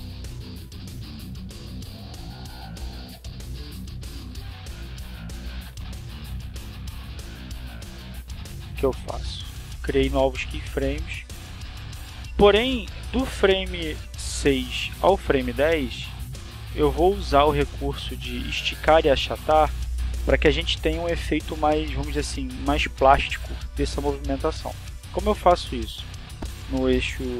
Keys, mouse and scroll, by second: 0.5 click, 1.2-2.3 right drag, 3.2 r, 4.2 click, 5.3 right click, 6.0 r, 6.6 click, 10.3 click, 20.1-20.7 scroll up 4, 25.5 right click, 26.8 s.